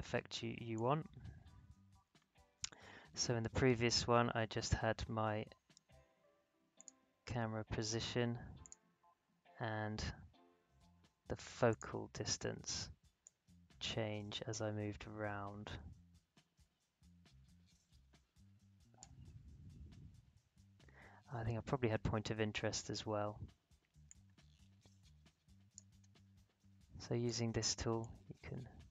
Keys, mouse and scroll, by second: 0.7-5.5 drag, 6.7 click, 9.1 scroll down 1, 11.7-20.9 drag, 20.9 scroll up 1, 22.7-28.9 drag.